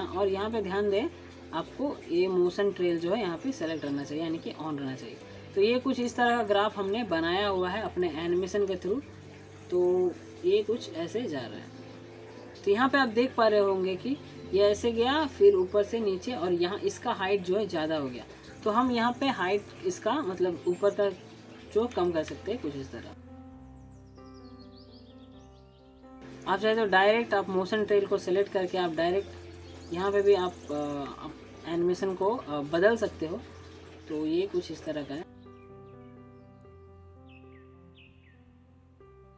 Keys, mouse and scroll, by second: 0.7 click, 5.4 click, 6.7 alt+scroll up 1, 7.0-7.9 alt+middle click, 7.5 alt+click, 7.9-8.5 alt+scroll up 1, 9.0-9.6 click, 9.6-10.1 scroll down 1, 10.1 alt+scroll up 1, 10.4 alt+click, 10.7 alt+middle click, 12.3 click, 15.4-20.5 drag, 20.5 scroll up 2, 20.7-21.4 alt+middle drag, 22.1 click, 23.2 scroll up 1, 23.3 click, 23.5 shift+middle click, 23.8 scroll down 1, 24.2 click, 24.4 alt+scroll down 1, 24.5 alt+middle click, 24.5 alt+scroll up 1, 25.1 shift+middle click, 25.2 drag, 27.5 scroll up 1, 27.8 middle click, 28.1-28.6 alt+scroll up 1, 29.3-29.8 drag, 32.1-33.3 click, 33.4 scroll up 1, 34.6 alt+click, 35.0-35.3 alt+scroll down 2, 35.2 alt+middle click, 35.5 click, 36.3-36.7 scroll up 2, 36.4 alt+middle click, 37.0 click, 37.1 scroll up 1, 37.2 click, 37.5-38.0 middle click, 38.0 scroll up 1, 38.1-38.5 scroll down 2, 38.2 alt+middle click, 38.5 alt+click.